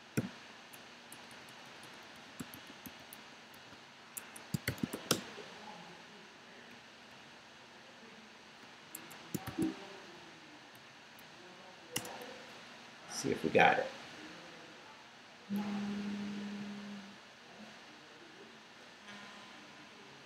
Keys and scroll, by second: 1.1-4.9 typing, 4.1 Escape, 5.1 Return, 6.7 Up, 9.0 Escape, 9.4 shift+;, 10.3 shift+Up, 11.9 Return.